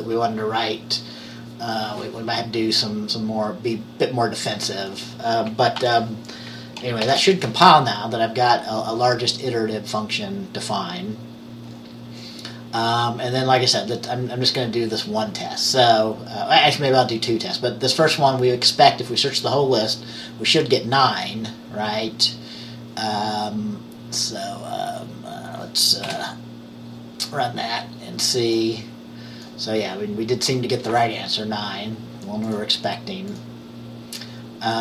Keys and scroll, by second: 5.9 ctrl+s, 7.2 ctrl+b, 26.2 F5.